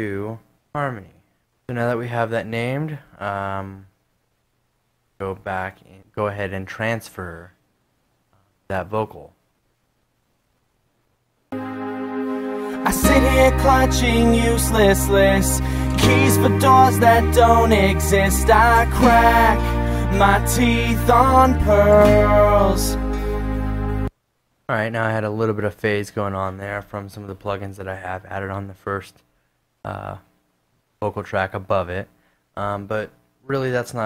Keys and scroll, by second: 0.4-1.2 typing, 3.0 super+`, 3.7 super+`, 5.2 super+Tab, 10.5 space, 23.8 space.